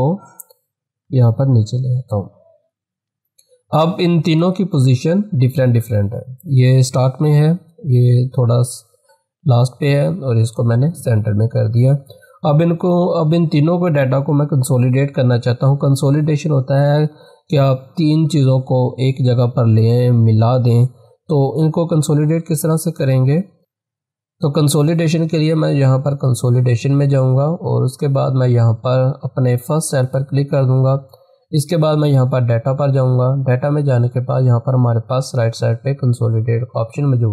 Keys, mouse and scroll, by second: 0.6 click, 1.5 ctrl+v, 2.8 scroll down 1, 3.7 scroll up 1, 4.4 click, 4.6 click, 23.2 click, 24.7 click, 28.8 click, 28.8 click, 32.4 click.